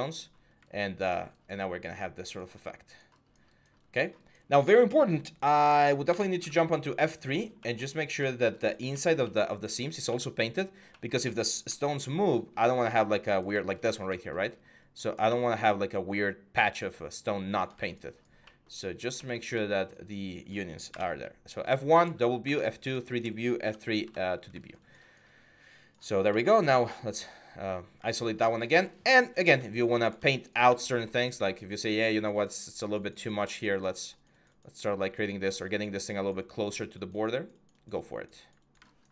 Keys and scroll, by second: 0.1 1, 5.9 F2, 6.2 F3, 15.0 x, 20.7 F1, 22.2 F2, 23.4 F3, 23.8 F2, 26.4 4, 27.5 1, 30.4 x.